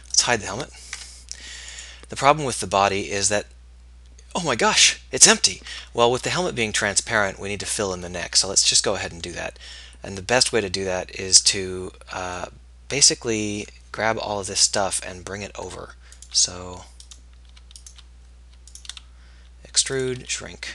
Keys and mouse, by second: 0.1 Tab, 1.1 h, 6.3 Tab, 14.7 middle click, 20.0 e, 20.3 s.